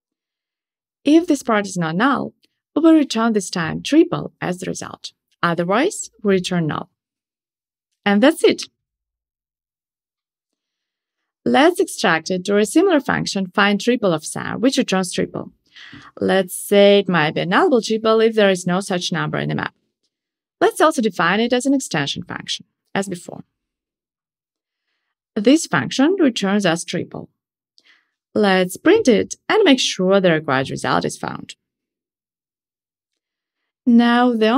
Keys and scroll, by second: 6.1 Escape, 15.4 alt+super+m, 22.0 alt+Return, 26.5 Return, 27.2 alt+super+l, 31.0 Tab, 32.3 ctrl+shift+r, 34.0 super+/.